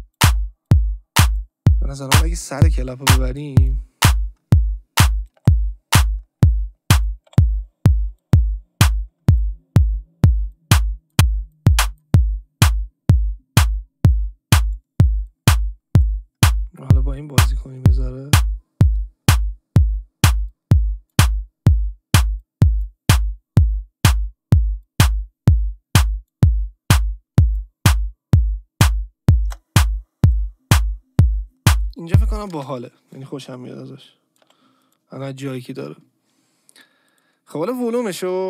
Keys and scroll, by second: 5.4 Delete, 7.3 Delete, 9.8 ctrl+d, 32.5 space, 33.5 Delete.